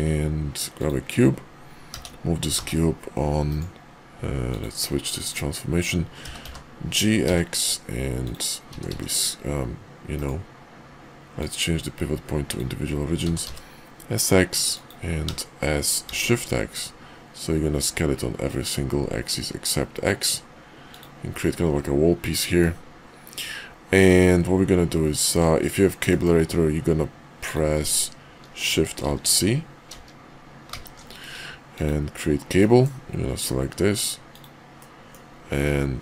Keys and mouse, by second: 1.9 g, 4.5-5.4 drag, 6.2 g, 8.7 s, 11.4-12.5 drag, 13.2 s, 15.2 s, 21.2-22.6 middle drag, 26.1 middle click, 27.3 click, 29.0 alt+shift+v, 30.6 alt+shift+c, 32.6-36.0 middle drag.